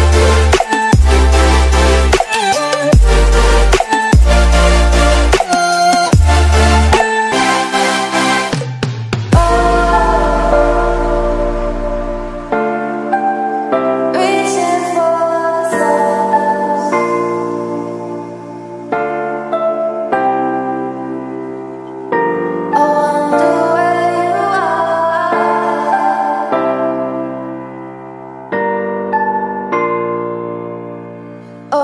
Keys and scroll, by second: 0.5 ctrl+z, 1.0-16.9 typing, 1.7 ctrl+z, 10.2 Escape, 14.6 ctrl+z, 18.9 space, 20.0 space, 21.3-27.3 typing, 21.9 ctrl+z, 28.7 ctrl+z, 29.9 z, 30.4 space, 30.5 ctrl+0, 31.5 ctrl+space.